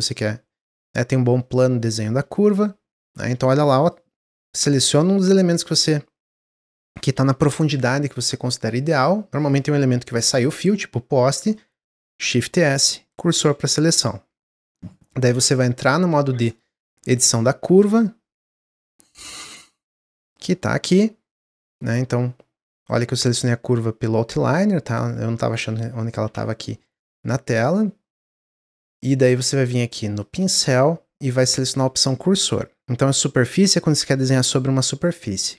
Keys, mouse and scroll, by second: 3.7 click, 4.2 click, 5.5 drag, 8.2 click, 12.1 shift+s, 15.8 Tab, 16.3 Tab, 16.5 click, 17.0-17.6 scroll down 5, 18.3 click, 18.6-19.1 scroll down 10, 19.1-20.1 scroll up 6, 20.1 click, 20.7 Tab, 25.5 middle click, 26.1 Tab, 26.9 Tab, 30.1-33.3 drag.